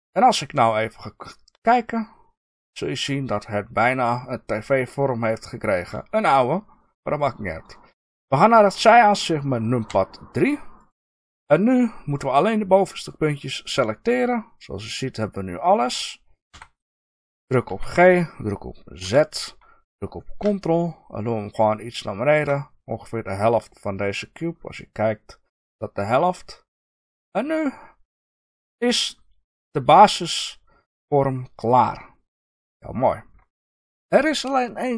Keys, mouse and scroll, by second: 0.7-9.8 middle drag, 9.8 KP_3, 9.9 middle click, 10.7 click, 10.8-12.3 middle drag, 12.3 click, 12.4-17.6 middle drag, 16.5 KP_3, 17.6 g, 22.4 ctrl+click, 24.0-25.9 scroll down 2, 25.9-27.1 scroll up 2, 27.1-27.8 middle drag, 27.8 scroll down 1, 31.9-33.5 middle drag, 33.7 ctrl+KP_Add.